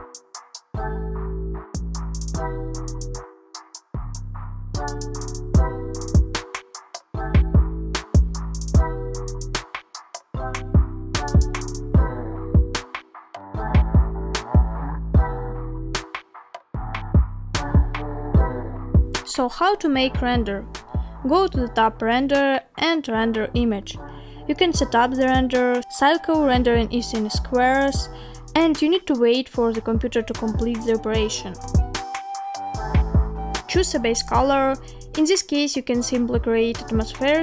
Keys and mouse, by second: 22.2-23.2 drag, 31.0 click, 33.2 click.